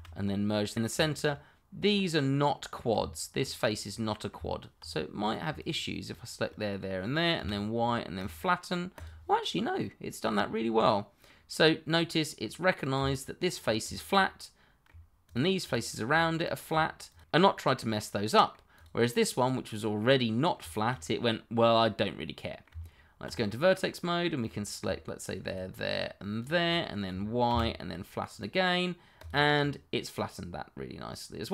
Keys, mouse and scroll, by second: 0.3 middle click, 1.4 shift+middle click, 1.8 click, 2.9 Tab, 3.6 click, 3.9 middle click, 4.3 Tab, 5.2 click, 7.3 y, 8.1 click, 9.4 middle click, 12.9 Tab, 13.8 click, 14.1 middle click, 15.2 shift+click, 16.6 click, 17.0 shift+click, 17.1 click, 17.5 middle click, 18.8 click, 19.6 middle click, 20.8 middle click, 22.7 Tab, 23.4 middle click, 24.4 click, 25.4 click, 26.4 shift+click, 27.5 y, 28.3 click, 29.6 middle click.